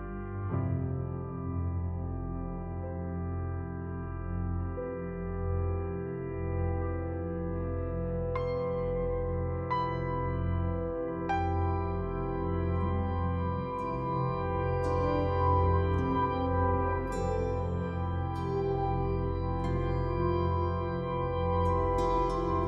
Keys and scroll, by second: 3.4 Delete, 12.7 ctrl+0.